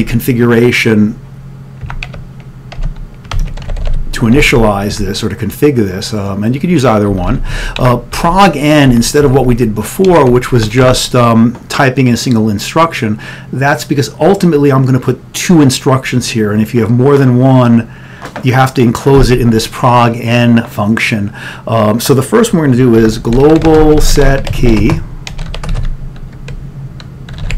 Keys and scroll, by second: 0.0-0.6 typing, 1.7-5.5 typing, 7.1-10.9 typing, 12.0-13.9 typing, 23.2-25.7 typing, 27.3-27.5 typing.